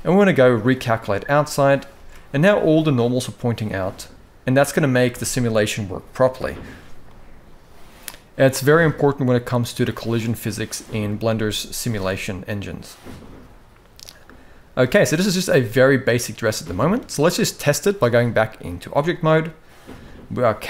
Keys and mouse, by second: 1.7 alt+a, 2.0-3.6 middle drag, 4.2 middle click, 6.8-7.9 middle drag, 9.5-10.8 middle drag, 11.0 shift+middle click, 11.5-14.4 middle drag, 14.7 shift+middle click, 15.2-16.6 middle drag, 17.8-18.4 drag, 19.0 middle click, 19.7 middle drag.